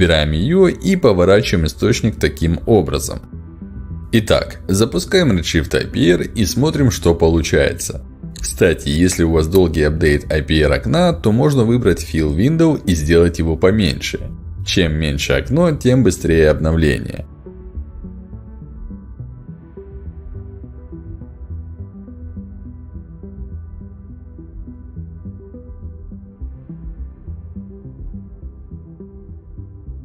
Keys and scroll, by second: 0.8 w.